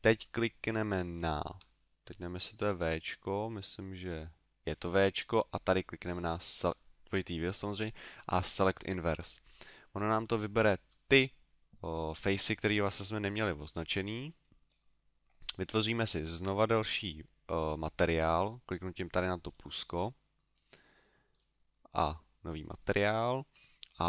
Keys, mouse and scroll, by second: 1.5 w, 10.2 middle click, 19.5 click, 21.3 click, 23.8 click.